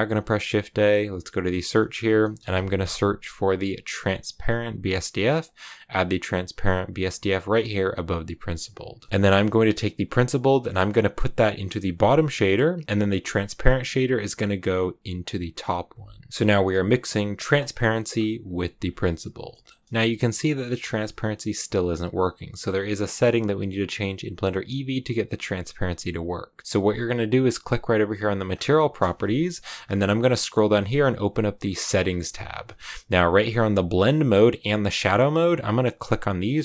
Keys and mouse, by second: 9.0 middle click, 10.6-12.2 drag, 12.8-15.6 drag, 18.7 click, 19.5 middle click.